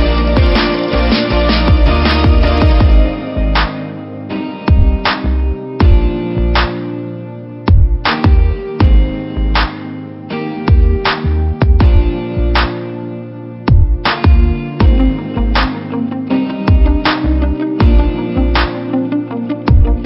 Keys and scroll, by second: 5.5 Return, 10.6 v, 11.9 ctrl+t, 15.5 Return.